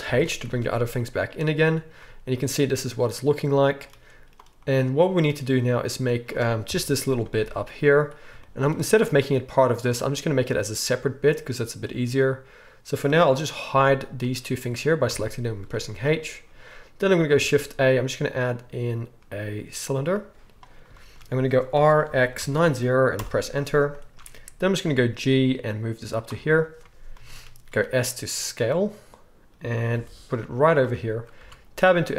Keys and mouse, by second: 0.0 alt+h, 0.4 alt+a, 2.5-9.4 middle drag, 5.2-9.4 drag, 5.2-9.7 right drag, 6.6 KP_1, 6.9 z, 9.7-12.6 middle drag, 12.6 right click, 13.7 h, 15.1 h, 15.2 click, 15.6 shift+right click, 15.7-16.6 shift+drag, 15.8 shift+right drag, 16.0 right click, 16.4 right drag, 16.6 right click, 16.8-23.9 drag, 17.3 shift+a, 21.7 r, 23.9-27.8 shift+middle drag, 24.8 g, 27.7 s, 27.8-32.1 right drag, 29.9 g, 31.3 Tab.